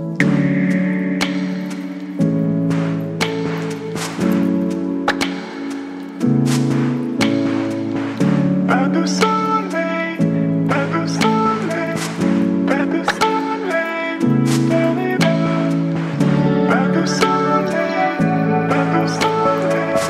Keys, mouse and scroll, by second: 1.6 ctrl+g, 3.8 click, 5.0-8.5 typing, 8.6 Return, 11.8 Return, 11.9-18.6 drag.